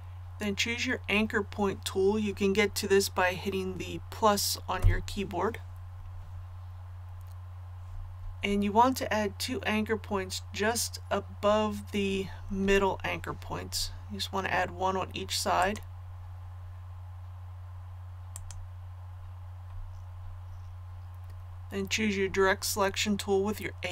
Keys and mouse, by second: 15.6 click.